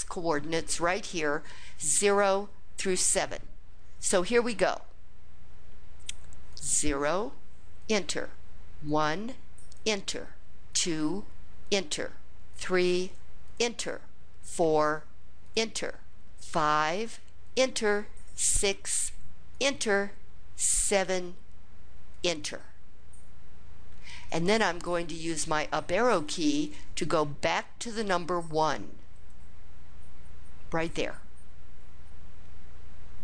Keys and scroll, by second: 6.3 0, 7.6 Return, 8.7 1, 9.6 Return, 10.5 2, 11.5 Return, 12.3 3, 13.3 Return, 14.2 4, 15.3 Return, 17.2 Return, 17.2 5, 18.3 6, 19.3 Return, 20.6 7, 21.9 Return, 25.9 Up, 26.3 Up, 26.8 Up, 27.3 Up, 27.7 Up, 28.3 Up, 28.9 Up.